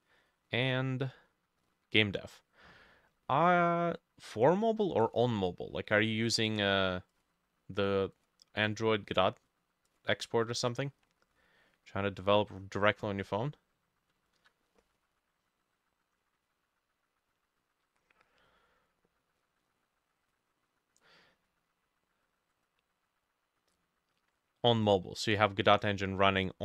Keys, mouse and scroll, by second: 10.4-12.6 ctrl+drag, 10.4 ctrl+middle click, 10.6 ctrl+s, 14.2-16.4 ctrl+alt+drag, 14.2 ctrl+alt+middle click, 14.4 ctrl+alt+e.